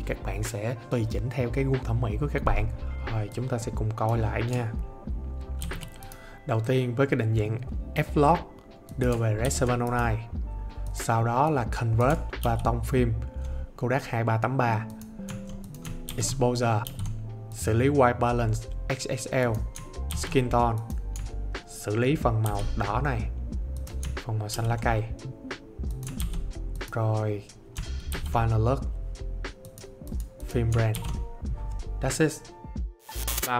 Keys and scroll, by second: 5.5 ctrl+d.